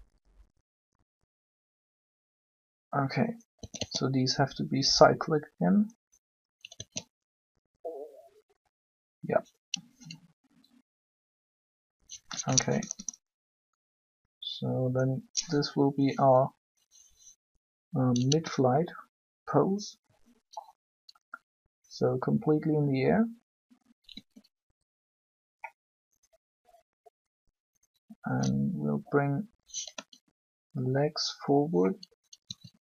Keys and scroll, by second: 3.5 a, 3.6 a, 6.7 alt+a, 12.6 Up, 24.1 r, 29.9 r.